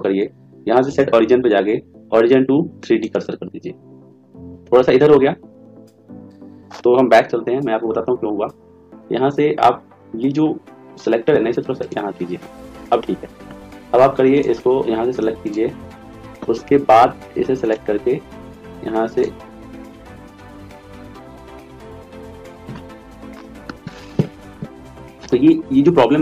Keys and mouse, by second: 0.8 click, 7.2 ctrl+z, 7.5 ctrl+z, 11.8 click, 17.5-18.9 right drag, 18.3 click, 21.3 ctrl+z, 21.8 ctrl+z.